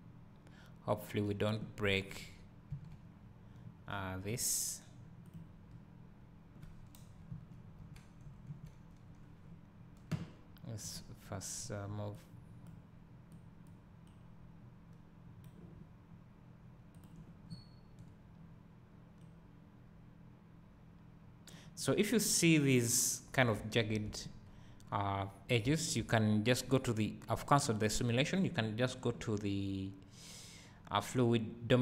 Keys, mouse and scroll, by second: 0.5 click, 2.8 Right, 5.6 click, 7.4 Right, 11.0 click, 12.2 click, 13.4 click, 14.2-25.5 right drag, 17.5 scroll up 1, 23.6 `, 26.0 Escape.